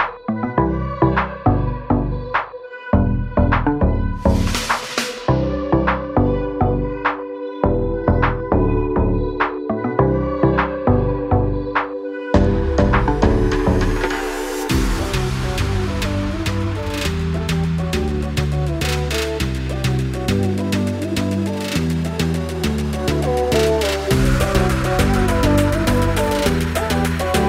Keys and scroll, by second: 0.0 Return, 4.3 space, 4.4 Escape, 8.3 m, 10.6 space, 16.6 r, 26.6 space, 27.3 Delete.